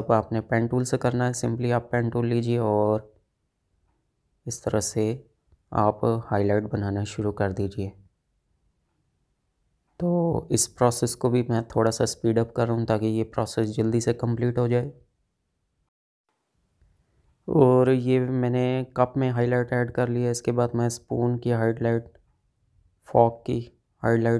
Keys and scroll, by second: 0.2 space.